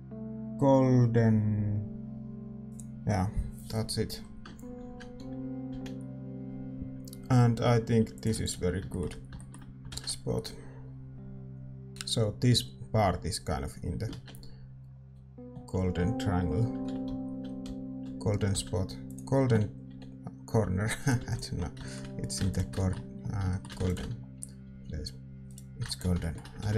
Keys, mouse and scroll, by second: 8.8 ctrl+s, 8.8-11.5 middle drag, 10.9 shift+z, 11.5 ctrl+s, 11.5-14.5 drag, 11.5 shift+z, 14.5-16.8 middle drag, 14.5 shift+z, 16.8 shift+f, 21.0 g, 21.5 ctrl+s, 21.5-23.5 middle drag, 23.5 ctrl+s, 25.0 ctrl+s, 25.0 r, 26.2 ctrl+s.